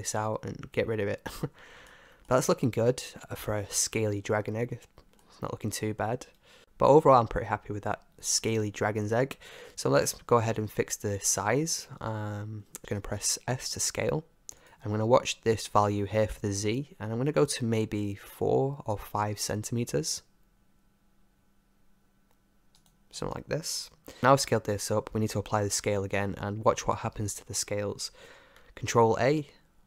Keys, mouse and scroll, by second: 1.9-5.1 middle drag, 5.2-6.7 middle drag, 9.7-12.0 middle drag, 12.7-16.9 middle drag, 13.7 s, 18.3 s, 29.2 ctrl+a.